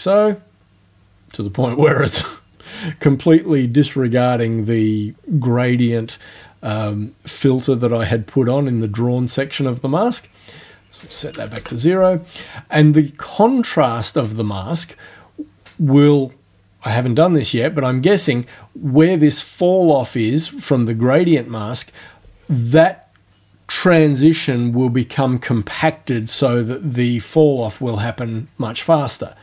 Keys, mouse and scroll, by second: 10.6 right click, 11.4 0, 11.6 Return, 28.8-29.4 drag.